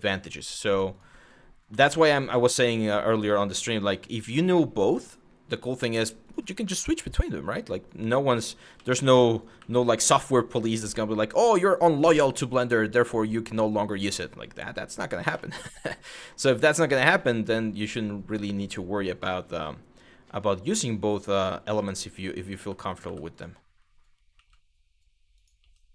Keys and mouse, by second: 1.5 middle click, 2.1 middle click, 3.4 1, 3.8 click, 4.5 g, 5.9 click, 6.3 shift+middle click, 7.5 click, 7.6 f, 8.4 ctrl+z, 8.9 click, 9.2 w, 10.4 g, 10.9 click, 11.4 click, 11.6 g, 12.4 click, 13.1 click, 13.9 click, 15.1 shift+middle click, 15.8 shift+middle click, 18.1 shift+middle click, 21.4 w, 22.2 w, 23.0 click, 24.0 e, 25.0 click.